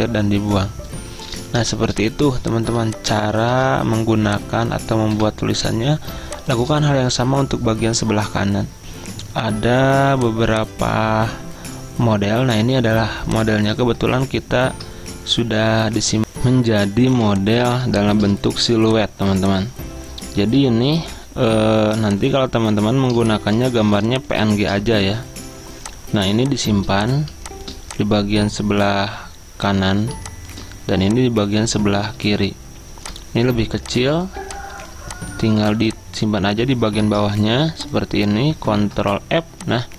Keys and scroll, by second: 13.9 alt+Tab, 15.0 alt+Tab, 16.2 Delete, 17.2 z, 20.8-21.6 typing, 24.3-25.0 typing, 34.9 typing, 36.8-37.6 typing, 38.9 ctrl+f.